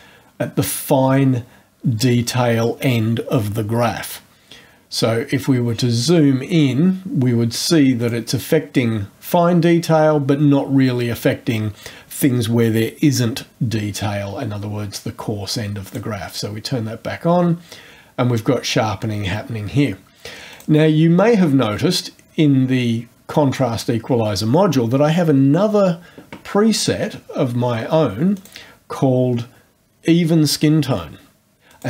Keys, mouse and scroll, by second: 5.6-6.3 scroll up 3, 8.0 click, 15.8 click, 20.5 click, 21.1 scroll down 1, 21.9 scroll down 1, 28.3 click, 31.7 click.